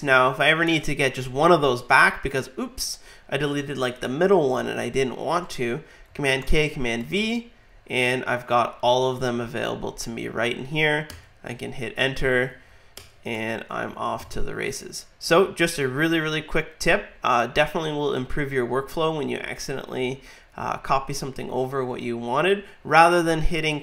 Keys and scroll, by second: 0.1 super+Right, 6.4 super+k, 7.0 super+v, 12.5 super+Left, 14.0 super+Right.